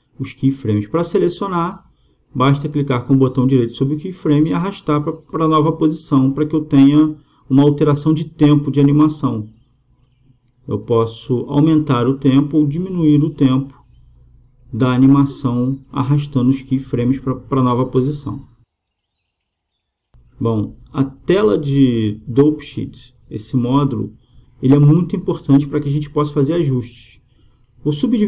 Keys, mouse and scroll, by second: 0.0-1.7 right drag, 3.0 g, 11.0-12.8 right drag, 11.5 g, 16.5 g, 19.4-21.2 drag, 21.3-28.2 middle drag.